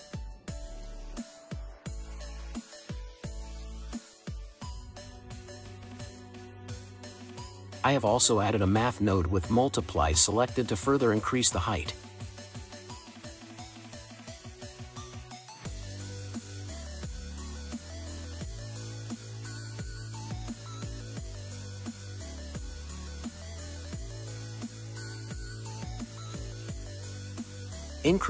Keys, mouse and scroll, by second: 1.1 shift+a, 6.4-8.8 drag, 8.8-12.0 scroll up 5, 12.0-12.9 scroll down 4, 12.9-13.9 scroll up 3, 13.9-14.4 scroll up 2, 14.4-17.5 drag, 21.6-22.6 scroll down 2, 22.6-24.6 scroll up 7, 24.6-25.4 scroll up 4, 25.4-25.9 middle drag, 25.9 scroll up 2, 27.4-28.2 drag.